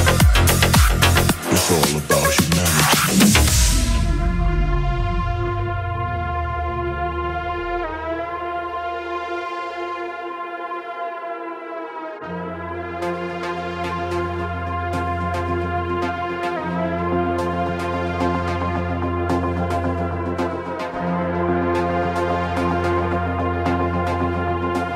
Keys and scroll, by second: 19.2 ctrl+t.